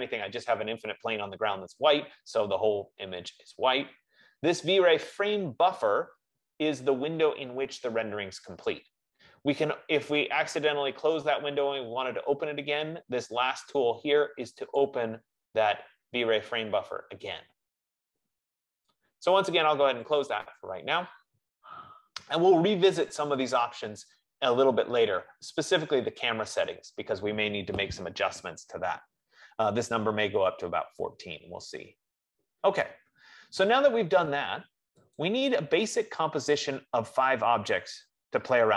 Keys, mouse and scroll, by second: 9.2-13.9 drag, 15.2-20.1 drag, 20.8-24.3 drag, 35.6-37.3 drag.